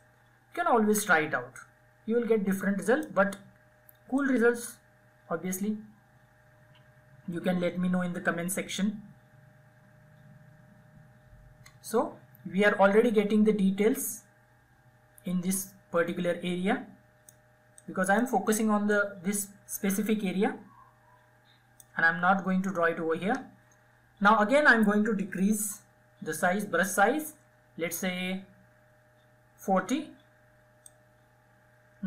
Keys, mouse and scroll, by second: 16.6-23.1 drag, 26.1 click, 26.3-28.4 typing, 29.7-32.0 drag.